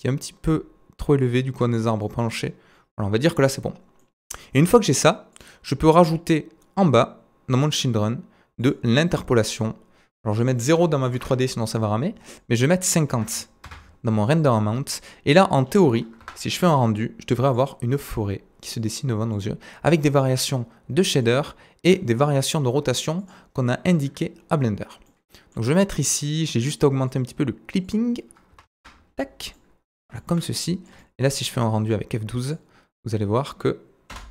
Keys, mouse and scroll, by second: 3.7-4.0 scroll down 2, 5.4-12.6 drag, 5.8-7.5 scroll down 8, 7.5-12.6 middle drag, 7.5-12.6 right drag, 9.5-10.4 scroll down 2, 14.5 middle click, 15.0 scroll up 1, 15.6-16.2 drag, 15.6-16.2 middle drag, 15.6-16.2 right drag, 15.6 scroll up 1, 16.2 KP_0, 16.7-17.5 scroll up 1, 17.7 click, 18.2-19.3 drag, 19.4-21.2 drag, 21.3-23.2 drag, 23.3-25.4 right drag, 23.6-24.3 scroll down 4, 24.3 scroll up 2, 24.5-24.9 scroll down 2, 24.9-25.4 middle drag, 26.2 click, 27.0-29.5 drag, 28.6 KP_0, 28.9 middle click, 28.9 right click, 31.0-32.5 shift+middle drag, 32.5-34.3 drag, 34.2 F12.